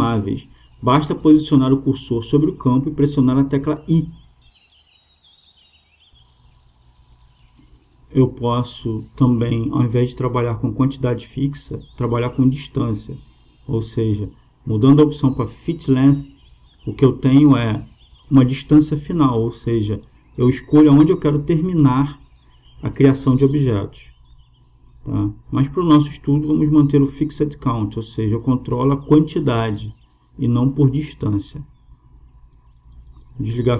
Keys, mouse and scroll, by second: 7.2-9.1 drag, 9.5-11.2 drag, 13.4-15.2 drag, 22.6-24.4 drag, 26.5-28.3 drag, 28.5-30.2 drag, 31.7-33.5 drag.